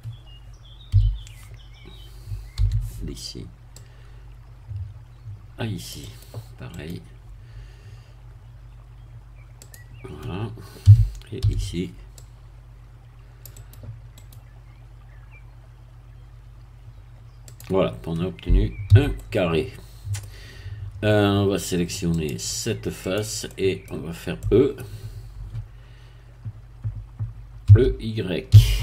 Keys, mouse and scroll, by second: 0.9 a, 2.5 c, 3.7-6.4 drag, 6.1 right click, 6.7 right click, 9.6-10.8 drag, 10.8 a, 11.4 c, 12.2-14.2 drag, 13.5-14.7 right drag, 17.5 click, 18.9 a, 19.1-20.3 middle drag, 20.3 scroll down 2, 22.1 click, 23.1 click, 23.5 middle click, 23.9-24.4 scroll down 1, 24.4 middle click, 27.7 e, 28.5 y.